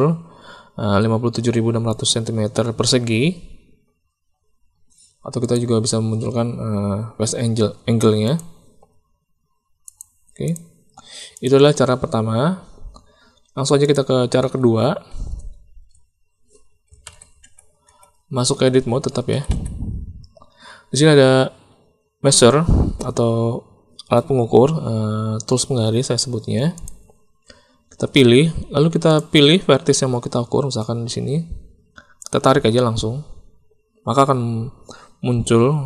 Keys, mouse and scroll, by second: 5.4-12.0 drag, 13.4 Tab, 14.4 Tab, 17.0 alt+a, 17.4 Tab, 17.8 Tab, 18.5 a, 19.3 a, 19.4 a, 26.7 click, 29.0 click, 32.2-35.8 drag.